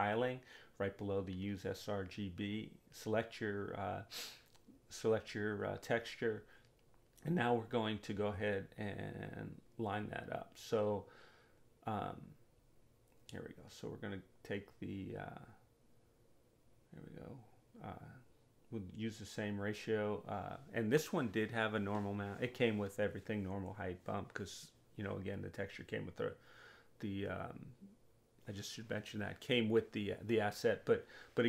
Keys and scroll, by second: 0.0 4, 0.5 Return, 13.5 2, 15.6 4, 16.2 Return, 21.5 2, 23.5 4, 24.0 Return, 29.0 2, 30.7 4.